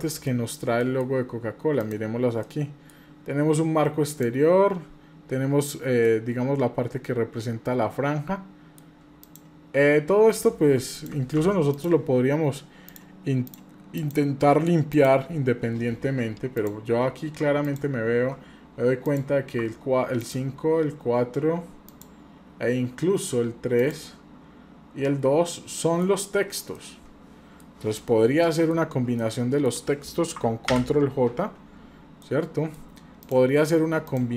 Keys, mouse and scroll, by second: 0.3-0.7 shift+middle drag, 0.8 middle click, 1.8 click, 2.4 middle click, 4.1 click, 6.1-8.8 middle drag, 9.2 shift+click, 10.4 drag, 10.9 click, 11.4 Delete, 11.7 click, 12.9 click, 13.4 click, 13.9 click, 14.9 click, 16.6 click, 17.6 ctrl+click, 19.0 click, 20.2 ctrl+click, 21.9 ctrl+click, 25.8 middle drag, 26.1 scroll up 2, 26.8-27.6 middle drag, 28.4-28.8 shift+middle drag, 29.2 middle click, 30.7 ctrl+j, 32.2 middle click, 33.2 click, 34.0-34.3 shift+drag.